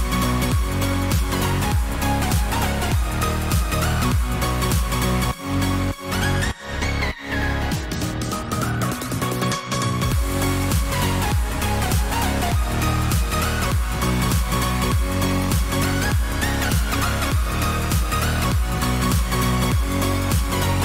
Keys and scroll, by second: 0.0-0.7 typing, 13.8 ctrl+j.